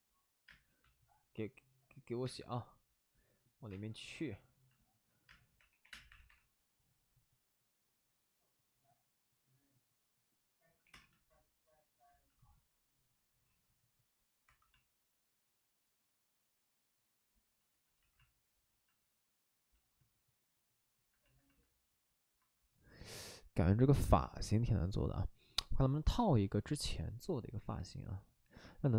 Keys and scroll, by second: 0.4 space, 2.2 space, 3.6 space, 5.2-6.2 typing, 10.8 7, 10.8 space, 12.0 ctrl+z, 13.4 ctrl+d, 14.4 2, 17.9 ctrl+z.